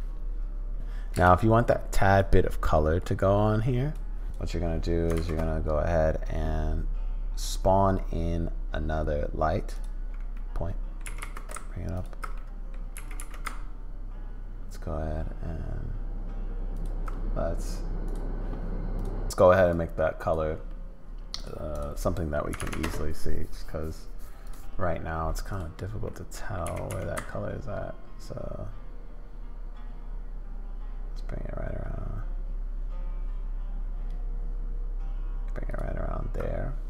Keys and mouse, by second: 1.2 space, 2.2-4.0 drag, 5.5 shift+a, 10.3 click, 11.6 g, 12.3 click, 12.9 g, 21.7-23.6 drag, 22.7 0, 24.4-25.7 drag, 26.1 middle click, 26.6 g.